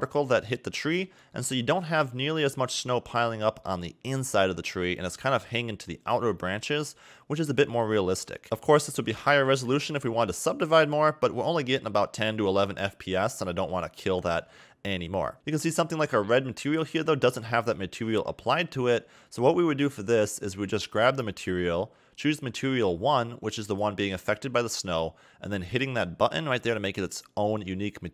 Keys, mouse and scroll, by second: 0.5 middle click, 2.1 scroll up 2, 2.6 middle click, 4.8 middle click, 5.5 scroll down 2, 5.7 middle click, 6.6 scroll down 2, 6.8 middle click, 8.7 scroll up 3, 9.8 a, 9.9 a, 13.0-13.3 scroll down 3, 14.1 shift+middle click, 15.3 scroll up 1, 15.6 middle click, 16.8 click, 21.0 click, 26.6 click.